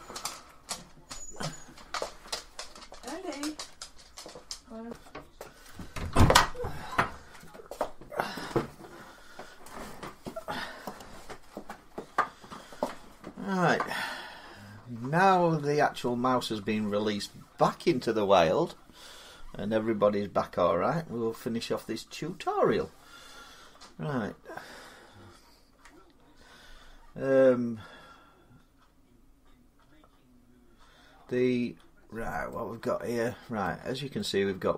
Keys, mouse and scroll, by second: 0.1 Tab, 3.5 middle click, 31.7 middle click, 31.8 middle click, 33.1-33.8 scroll down 6, 33.4 middle click.